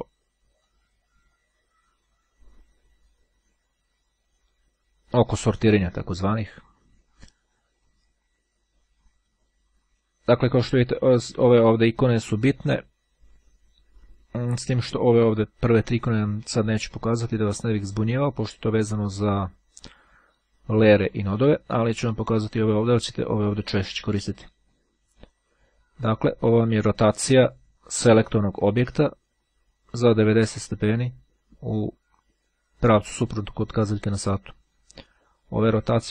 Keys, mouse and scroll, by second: 0.7-3.0 drag, 4.4 click, 6.3 click, 7.9-9.9 drag, 24.7 click, 25.5-26.1 scroll down 1, 29.1-31.3 drag.